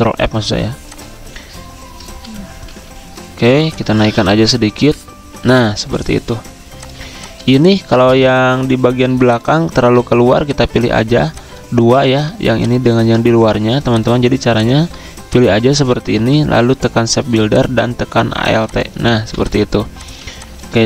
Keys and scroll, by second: 0.1 ctrl+z, 2.0 ctrl+z, 2.5 ctrl+z, 3.5-4.1 typing, 4.9 ctrl+], 7.0-7.9 typing, 12.0 ctrl+z, 13.2 ctrl+alt+2, 16.2 ctrl+z, 19.2-20.2 typing.